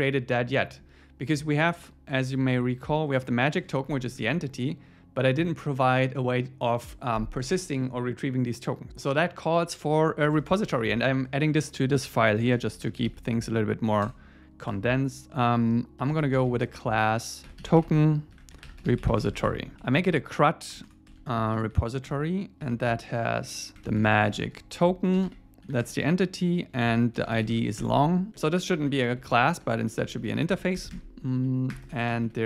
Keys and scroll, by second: 3.7 super+1, 10.3 Return, 10.7 Up, 11.6 Down, 12.3 alt+l, 22.1 Return.